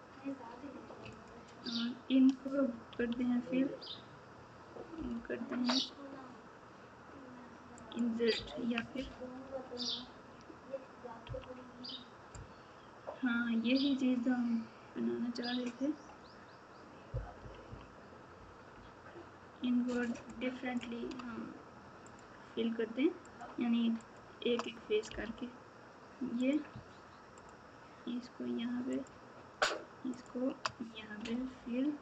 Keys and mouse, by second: 1.1 alt+click, 2.9 f, 9.4 ctrl+z, 17.3 KP_6, 17.6 KP_6.